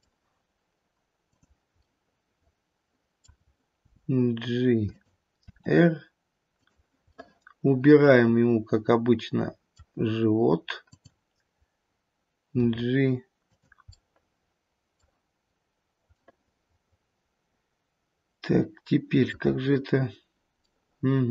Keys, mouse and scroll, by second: 1.2 middle click, 1.2 click, 2.1 middle click, 3.9 g, 5.4 r, 7.1 middle click, 9.7 middle click, 10.8 click, 12.7 g, 13.9 middle click, 16.1 middle click, 17.7 middle click, 18.0 middle click, 18.3 middle click, 18.5 middle click, 20.7 middle click.